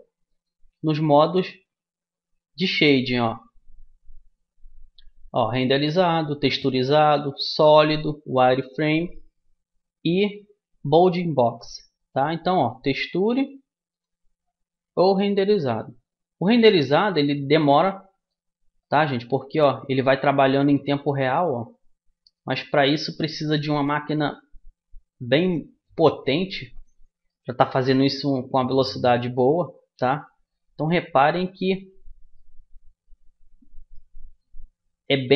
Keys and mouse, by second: 0.3-2.1 drag, 13.9-16.0 drag, 18.0-25.5 middle drag, 27.6-34.4 middle drag.